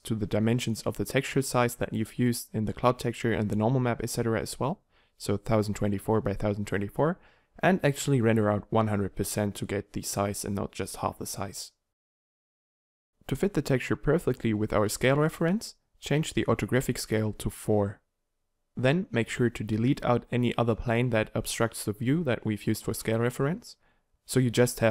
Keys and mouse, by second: 4.7 BackSpace, 4.8 BackSpace, 20.6 x.